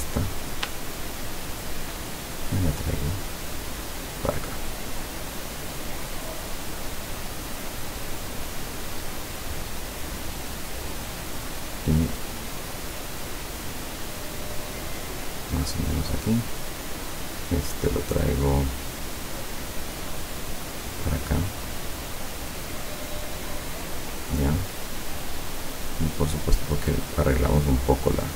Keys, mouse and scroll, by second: 0.5 shift+click, 1.2 shift+click, 1.7 shift+click, 2.3-4.5 shift+drag, 4.9 click, 8.6-10.0 drag, 10.7-15.8 drag, 20.6-22.3 drag, 22.7-25.1 drag, 25.6 click, 26.6 click, 27.3-28.3 drag.